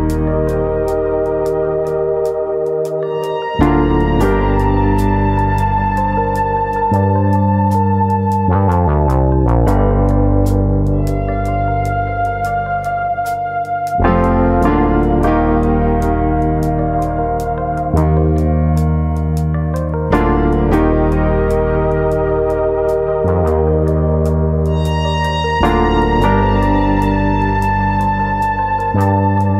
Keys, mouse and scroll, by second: 1.5 click, 1.8 shift+middle click, 2.6 e, 3.7 click, 4.7 s, 5.5 click, 5.7 shift+middle click, 6.4 e, 7.6 click, 8.0 s, 8.6 click, 9.1 e, 12.4 click, 12.6-13.1 scroll down 2, 13.1 shift+middle click, 13.1 scroll down 2, 13.4-14.3 scroll up 1, 14.3 alt+click, 14.3 scroll up 1, 14.9 click, 16.9 click, 17.5 click, 19.0 click, 19.3 alt+click, 20.0 ctrl+KP_Add, 20.8 click, 22.5 click, 25.5 click, 25.8-26.3 scroll down 4, 26.3 shift+middle click, 26.5-27.7 scroll up 6, 27.1 shift+middle click, 27.7 alt+click, 28.5 click, 29.4 shift+middle click.